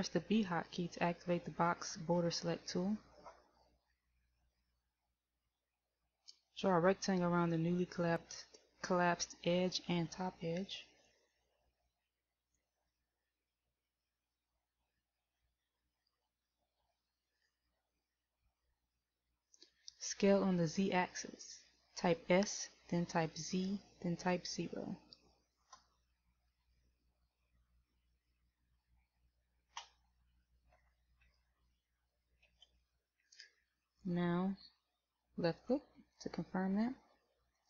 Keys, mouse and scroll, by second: 4.8 b, 14.2 middle click, 17.2 KP_1, 27.0 z, 29.7 Escape, 31.1 s.